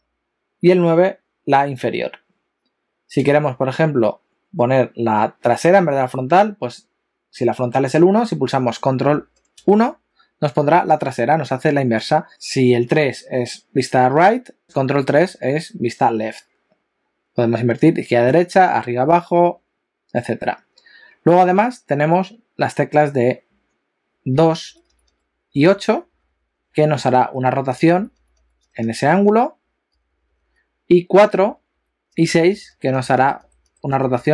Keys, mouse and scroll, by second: 3.3 KP_1, 9.5 ctrl+KP_1, 12.3 KP_4, 12.3 KP_3, 15.1 ctrl+KP_3, 24.7-34.3 typing.